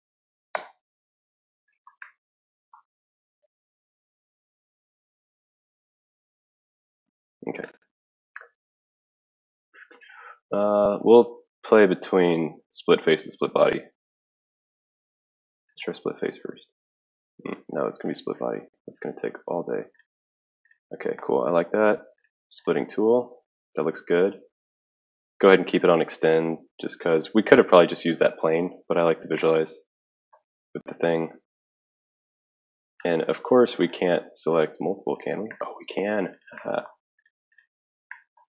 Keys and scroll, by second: 0.0-0.4 typing, 0.5 Return, 3.3 typing.